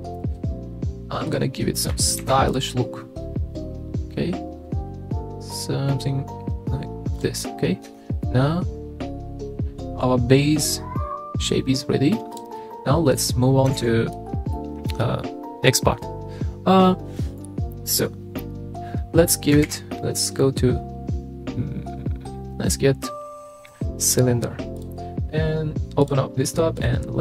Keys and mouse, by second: 0.1 click, 1.3 click, 2.2 ctrl+r, 7.1 click, 7.4 click, 7.9 Tab, 8.2-12.1 middle drag, 12.6-13.2 middle drag, 13.7 alt+z, 14.1-14.9 middle drag, 19.6 shift+a, 26.0 click, 26.8-27.2 drag.